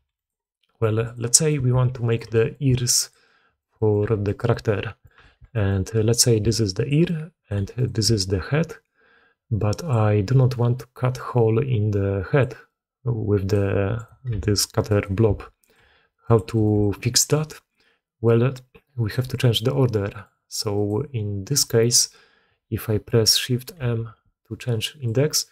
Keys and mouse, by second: 0.3-0.7 drag, 1.1 g, 1.2 click, 2.0 shift+click, 2.2 drag, 2.6 s, 3.1-3.5 drag, 3.6 click, 3.9 g, 4.4-4.9 drag, 5.2 alt+a, 5.4 click, 5.9 click, 6.3 d, 6.4 click, 6.8 d, 6.9-7.4 drag, 6.9 d, 7.7 click, 7.7 d, 8.0-9.8 drag, 9.8-16.6 typing, 10.6-12.4 drag, 12.5-13.4 drag, 13.8 click, 16.4 click, 16.8-19.0 drag, 19.0 d, 19.4-20.1 drag, 20.6 click, 23.6 shift+m.